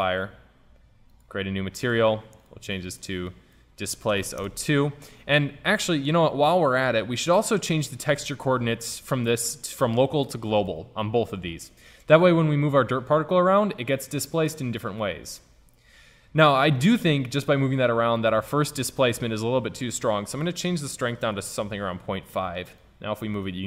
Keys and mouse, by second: 1.2-4.8 drag, 8.0-10.0 drag, 10.6-14.9 drag, 15.3 ctrl+z, 18.3 click, 19.2 ctrl+z, 22.9-23.6 drag.